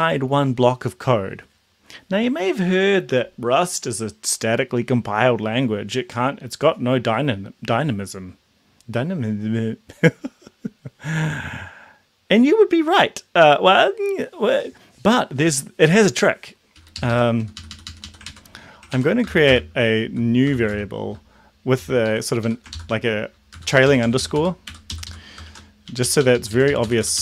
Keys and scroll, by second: 16.8 Right, 17.0 Left, 17.1 Left, 17.5 Up, 17.6 Up, 17.9 Up, 18.0 Up, 18.2 ctrl+Right, 18.9 ctrl+Right, 19.2 shift+-, 19.4 shift+space, 20.0 Left, 20.5 shift+;, 20.7 shift+space, 21.8 Left, 21.8 Down, 22.0 Left, 22.3 Up, 23.2 ctrl+shift+Left, 23.5 Down, 23.7 Down, 23.8 Down, 24.0 Down, 24.1 Down, 24.3 Down, 25.0 End, 25.4 shift+-, 25.8 Up, 26.0 Up, 26.2 Up, 26.3 Left, 26.5 Left, 26.6 Left, 26.9 Up.